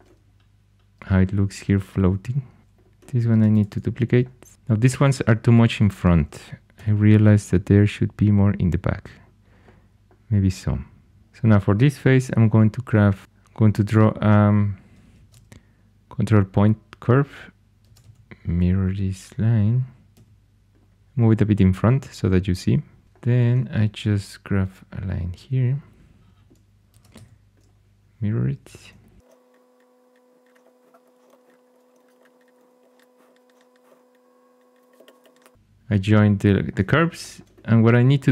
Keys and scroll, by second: 2.0 4, 2.6 h, 3.3 alt+x, 3.5 alt+x, 6.7 g, 11.2 x, 12.0 ctrl+super+c, 13.2 ↺, 15.1 ctrl+super+c, 17.8 alt+x, 17.9 alt+x, 20.1 y, 20.9 g, 22.8-23.5 typing, 26.9 alt+x, 27.1 y, 28.5 2, 29.2 x, 29.2 ctrl+super+c, 30.6 2, 31.2 alt+x, 31.7 2, 31.9 alt+x, 32.8 j, 33.9 s, 34.9 0, 35.0 Return, 35.2 j.